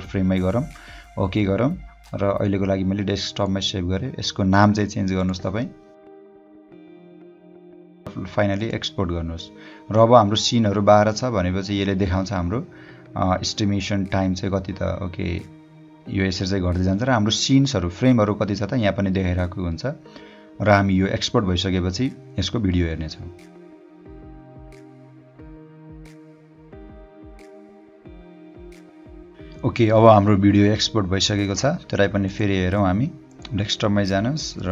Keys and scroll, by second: 6.6-8.0 typing.